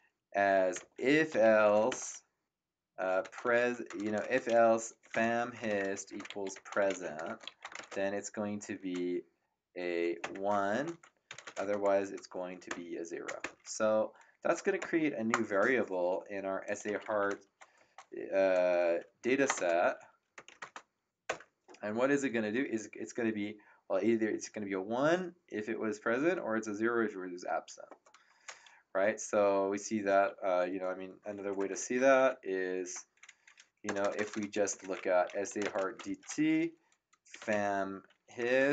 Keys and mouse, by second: 0.5-8.1 typing, 10.2 1, 11.2 shift+,, 11.4 space, 13.4 0, 14.8 Return, 16.6-21.0 typing, 16.6 click, 21.2 Return, 31.3 Up, 31.6 BackSpace, 32.0 ctrl+Left, 32.6 ctrl+Right, 33.8 BackSpace, 34.7 End, 35.2-38.7 typing.